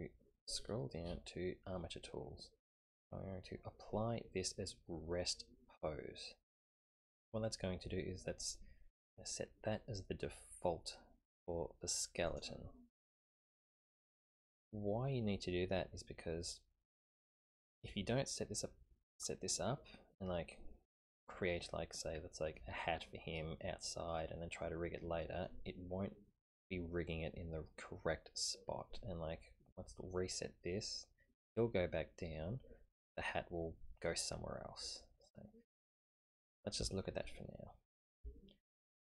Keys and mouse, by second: 12.3 click, 14.2-16.5 middle drag, 21.4-22.6 middle drag, 24.2 middle click, 25.1 middle click, 35.2 middle click, 37.0-38.1 shift+middle drag, 38.3-39.0 middle drag.